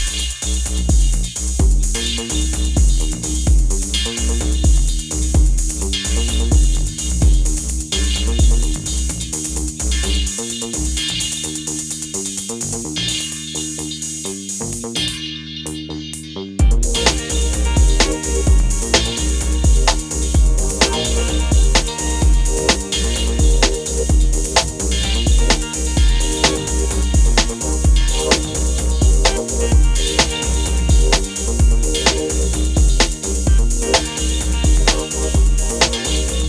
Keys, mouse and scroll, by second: 21.5-22.0 alt+scroll down 1, 23.8-28.0 drag.